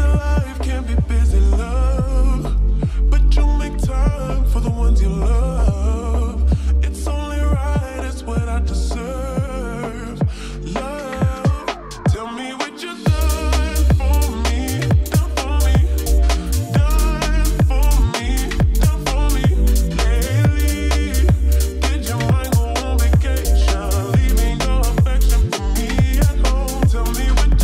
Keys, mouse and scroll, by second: 1.6 ctrl+z, 2.3-4.4 drag, 21.6-22.4 drag, 23.0-24.8 drag, 26.6 ctrl+d.